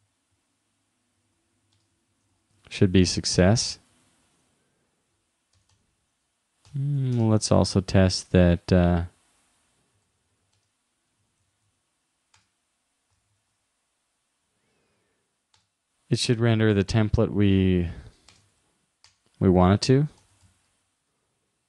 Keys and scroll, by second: 2.4 shift+-, 3.9 super+s, 7.8 shift+'.